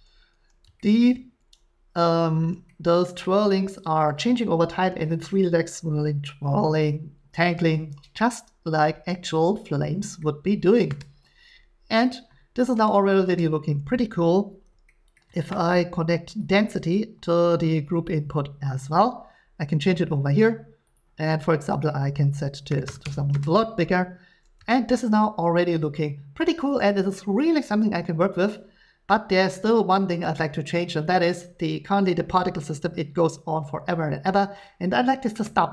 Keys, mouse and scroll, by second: 4.3 scroll, 8.1 middle click, 10.2-13.6 middle drag, 18.1 click, 20.9 click, 21.8 click, 22.7 typing, 23.0 Return, 24.5 typing, 25.1 shift+scroll, 26.2 shift+scroll, 27.1 shift+scroll, 28.3 shift+scroll, 30.7 shift+middle click, 35.4 middle click.